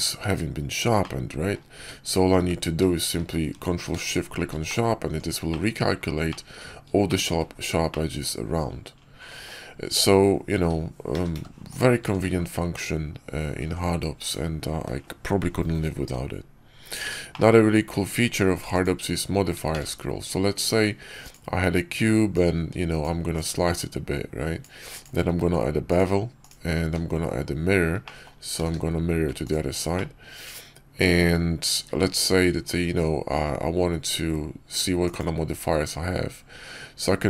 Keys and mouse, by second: 0.9 click, 1.6 Tab, 2.3 q, 4.6 click, 4.9 Tab, 5.4 click, 6.2 click, 7.0 shift+click, 7.8-9.4 drag, 9.8 q, 11.0 a, 11.2 q, 11.9 Tab, 17.2-17.6 middle drag, 18.5 x, 19.6 shift+a, 22.3-23.3 drag, 23.6-24.9 drag, 25.2 q, 26.7 q, 27.9 drag, 28.5 alt+x, 29.3 drag, 29.8-30.9 drag, 31.8 q.